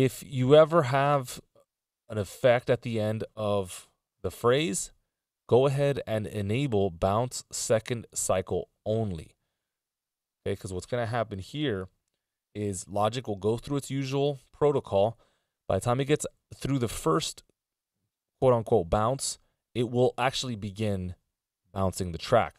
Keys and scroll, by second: 4.7 ctrl+alt+super+m.